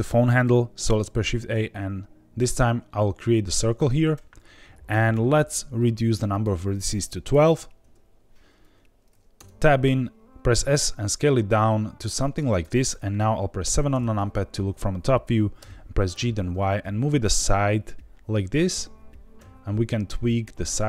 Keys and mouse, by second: 0.9 shift+a, 5.0 click, 6.3-8.2 drag, 9.3 Tab, 10.2 Escape, 10.5 s, 12.4 click, 13.6 KP_7, 13.9 KP_Enter, 15.5 g, 16.1 y, 19.3 s.